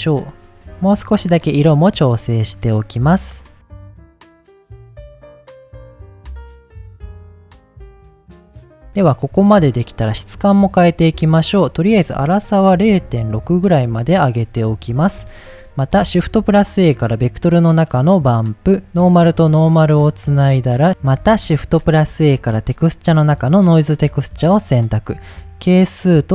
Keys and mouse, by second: 0.5-2.5 middle drag, 2.5 click, 4.1 click, 9.5 middle click, 11.9-14.4 drag, 15.5 middle click, 16.1 shift+a, 19.0-20.0 drag, 20.7 middle click, 21.5 shift+a, 25.3-26.3 drag.